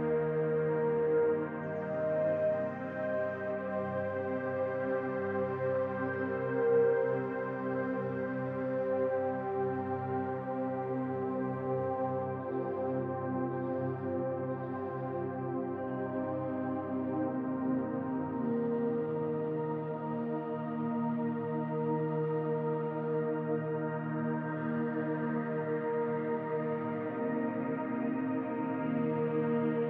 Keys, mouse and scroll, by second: 0.3 middle click, 2.4 m, 3.6 middle click, 5.4 click, 5.9 shift+click, 6.2 middle click, 7.0 m, 8.6 click, 8.9 middle click, 10.0 shift+click, 11.1 m, 12.4 middle click, 13.4 shift+middle click, 14.4 middle click, 15.0 click, 15.6 shift+click, 16.8 m, 17.2 middle click, 18.5 click, 19.2 shift+click, 20.3 m, 21.4 middle click, 22.5 shift+middle click, 23.2 middle click, 23.7-24.4 scroll up 2, 24.8 click, 25.0 shift+click, 26.3 m, 26.9 middle click, 28.0 click, 28.6 shift+click.